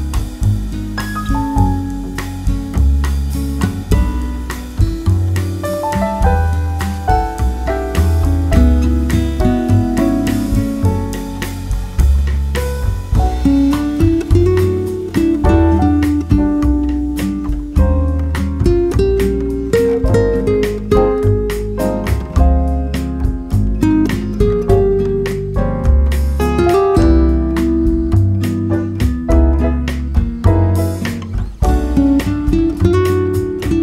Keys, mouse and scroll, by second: 0.9 middle click, 0.9 KP_1, 2.0 Tab, 3.7 z, 5.4-7.8 drag, 7.8-8.9 middle drag, 10.3-11.9 drag, 13.2-20.1 drag, 20.1 middle click, 20.8 click, 20.9 shift+2, 22.2-23.7 drag, 23.4-25.1 middle drag, 24.0 click, 24.2 click, 24.9-33.8 drag.